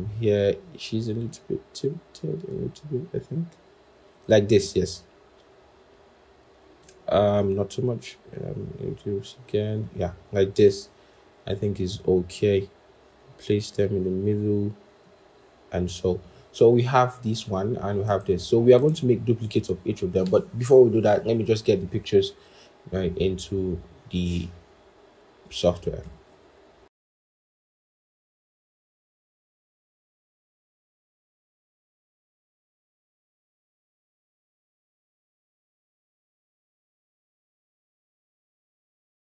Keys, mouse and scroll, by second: 11.4 shift+click, 25.9 ctrl+shift+p, 26.8 double click, 27.3-28.5 scroll down 1, 31.3 shift+click, 34.0 shift+click, 35.5 alt+Tab, 36.0 ctrl+shift+p, 37.3 double click.